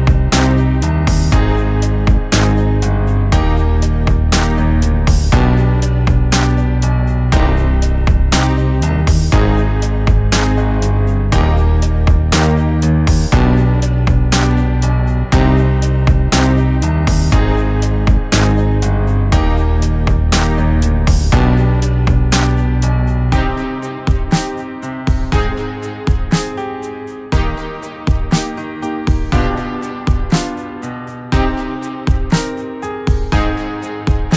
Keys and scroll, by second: 7.2 [, 7.3 [, 7.8 [, 19.0 ctrl+t, 21.3 ctrl+t, 25.8 ctrl+z, 27.3 ctrl+t, 31.7 [, 32.1 [, 32.9 ctrl+z, 33.2 ctrl+x.